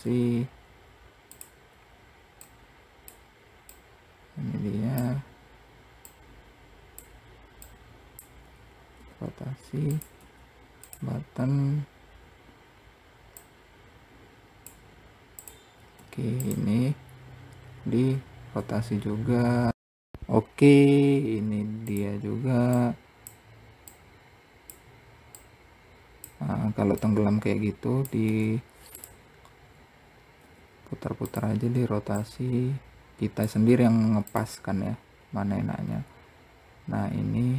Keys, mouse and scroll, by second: 1.2-1.7 scroll down 1, 1.8 click, 3.1 click, 5.5 click, 7.0 click, 8.3 r, 12.8 click, 14.7 click, 18.0 r, 19.7 click, 22.2 click, 24.2 click, 25.6 click, 27.3 click, 30.7 r, 32.5 click, 35.5-36.2 scroll down 2, 36.2 scroll up 1.